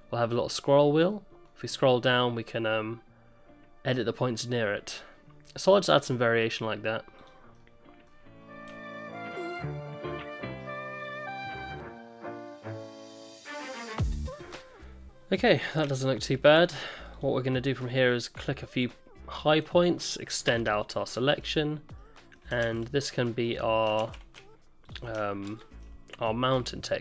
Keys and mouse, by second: 7.5 middle click, 9.0 middle click, 9.1 alt+s, 9.4 shift+click, 9.6 middle click, 9.7 alt+s, 10.0 shift+click, 10.3 alt+s, 10.7 middle click, 10.9 middle click, 11.5 middle click, 11.8 middle click, 12.0 alt+s, 12.2 middle click, 12.3 ctrl+z, 12.4 middle click, 12.6 middle click, 13.2 click, 13.3 alt+s, 13.6 middle click, 13.7 alt+s, 14.1 click, 14.2 click, 15.4 click, 17.1 shift+click, 18.4 shift+click, 18.8 shift+click, 19.3 shift+click, 19.6 middle click, 20.5 ctrl+KP_Add, 21.1 ctrl+KP_Add, 22.0 middle click, 22.6 ctrl+z, 23.1 middle click, 24.0 ctrl+z, 25.5 ctrl+KP_Add, 26.4 middle click.